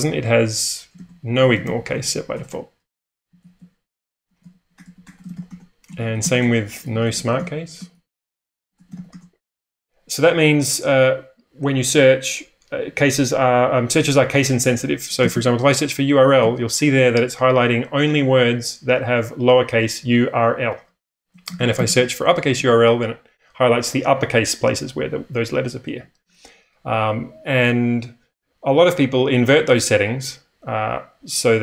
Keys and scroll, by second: 0.9 ctrl+w, 1.0-5.8 typing, 11.7 /, 14.8-17.0 typing, 21.0-22.3 typing, 22.6 Return.